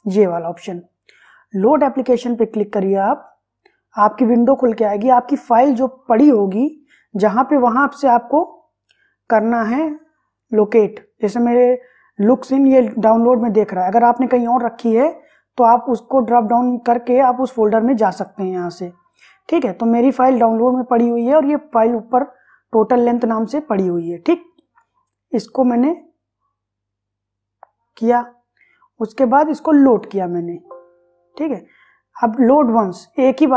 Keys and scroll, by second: 0.9 Page_Up.